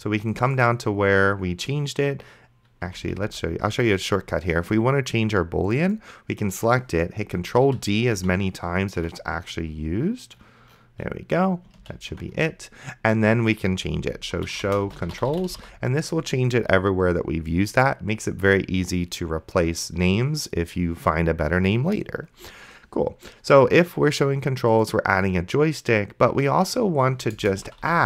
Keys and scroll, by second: 3.3 ctrl+z, 7.9 ctrl+d, 12.1 ctrl+d, 14.1-16.3 typing, 27.3-28.0 typing.